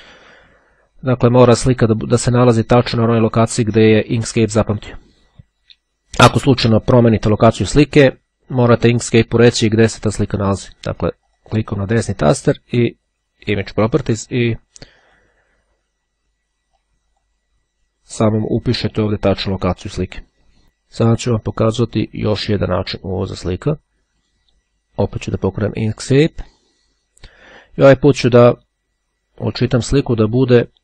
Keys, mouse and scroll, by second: 11.4 right click, 13.5 click, 15.1 click, 16.7-17.8 drag, 20.7-23.5 drag, 24.3 click, 26.0 click, 30.4 click.